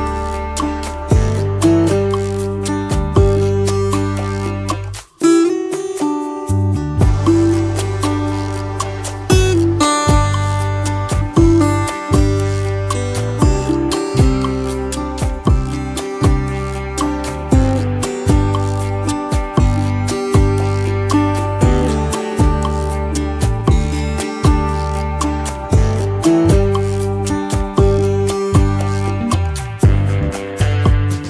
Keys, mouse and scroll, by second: 8.0 space, 21.3 ctrl+l, 22.4 shift+click, 29.2 double click, 29.4 space.